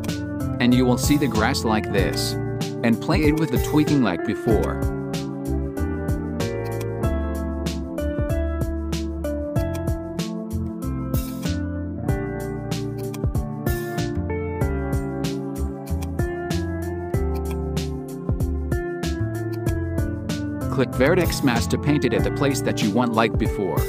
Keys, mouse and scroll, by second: 2.0-4.6 drag, 6.7-9.2 drag, 9.6-15.6 drag, 15.9-19.6 drag, 21.6 click, 23.4 click.